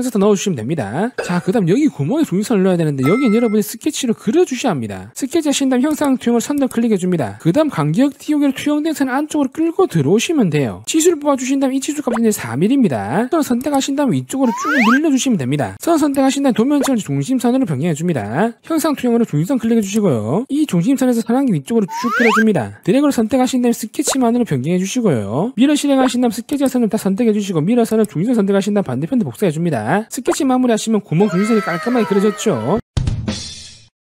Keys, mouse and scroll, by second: 0.1 click, 0.3 click, 0.5 click, 0.9 click, 2.7 scroll up 2, 3.1 middle click, 6.3 click, 7.0 click, 9.6 click, 10.8 click, 11.0 click, 11.7 click, 12.1 click, 12.6 4, 12.8 click, 13.6 click, 14.5 click, 15.5-15.8 scroll up 2, 15.8 click, 16.9 click, 17.7 scroll down 2, 18.0 scroll up 2, 18.5 click, 18.7 click, 20.3 click, 20.7 1, 21.8 click, 22.7 click, 23.0 click, 24.2 click, 25.2 click, 25.9 w, 26.6 click, 27.6 click, 28.4 click, 28.9 click, 29.3 click, 29.8 click, 30.3 right click, 31.2 click, 31.2 right click.